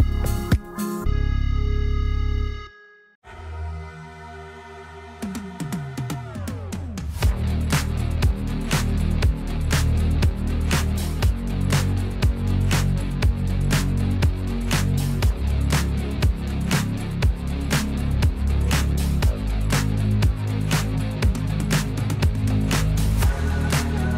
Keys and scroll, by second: 1.4 \, 5.9-8.2 typing, 10.9 \, 11.4 t, 13.2-14.2 typing, 17.8-19.1 typing, 20.6 l.